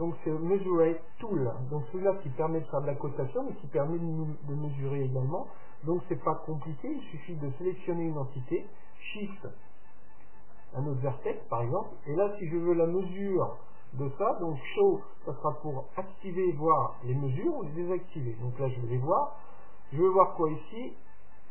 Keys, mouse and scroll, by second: 7.5-9.3 right drag, 10.5-12.3 right drag, 17.9-19.8 drag.